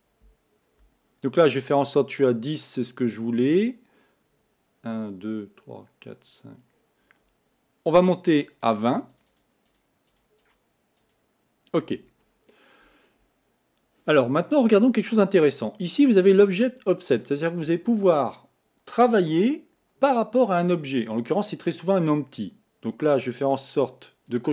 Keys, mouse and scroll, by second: 8.5-11.8 drag, 24.3 click.